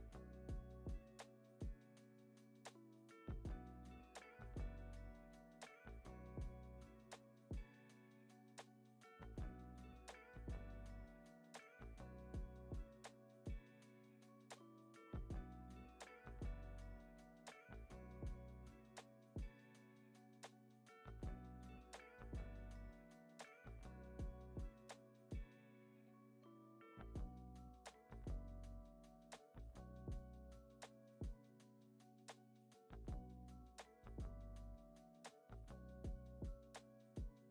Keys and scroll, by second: 15.9 super+s, 18.6 space, 18.8 super+s, 19.2 z, 20.9 z, 22.6 super+c, 24.2 u, 25.9 super+v, 30.2 =.